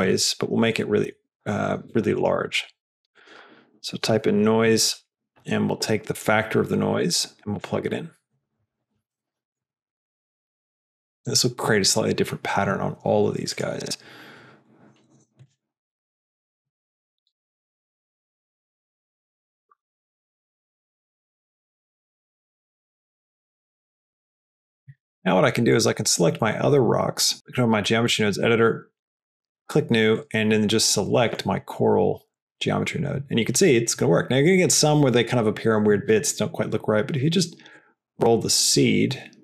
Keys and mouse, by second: 2.3 click, 2.6 click, 2.8 shift+a, 6.9-7.8 drag, 13.4-14.0 drag, 15.9 middle drag, 19.6 drag, 20.3 click, 28.8-29.3 drag, 37.6 click.